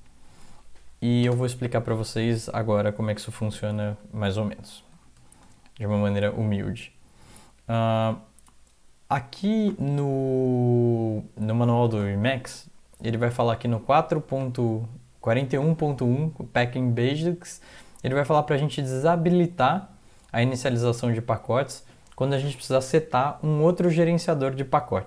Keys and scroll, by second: 1.2 typing, 3.9 alt+Tab, 4.9 alt+Tab, 5.2 alt+Tab, 5.4 alt+Tab.